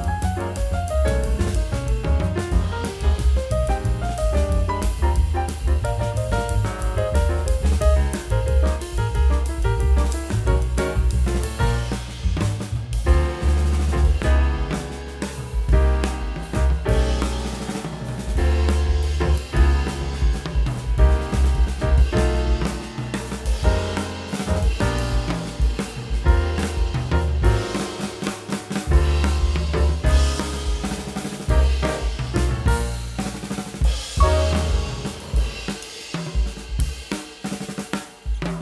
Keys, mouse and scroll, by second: 0.6 alt+middle click, 1.0 alt+scroll down 1, 1.4 middle click, 1.6 scroll down 1, 2.3 middle click, 3.1 middle click, 4.1 Delete, 4.4 middle click, 8.8 middle click, 9.6 scroll down 1, 11.4 scroll down 1, 12.3 middle click, 16.6 Delete, 19.8 middle click, 21.7 Delete, 25.3 Delete, 29.8 Delete, 30.9 Delete.